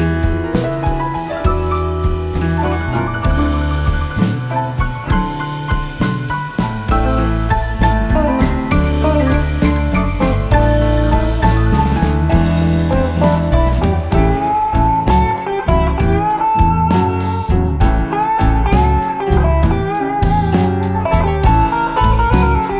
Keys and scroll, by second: 5.3 e, 20.7 3.